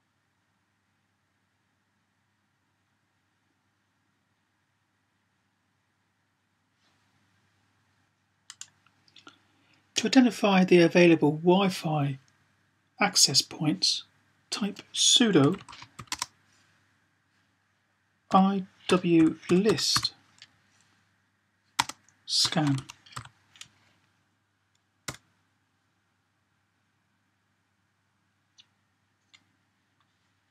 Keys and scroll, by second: 15.3-15.8 typing, 17.9-19.7 typing, 22.3-22.9 typing.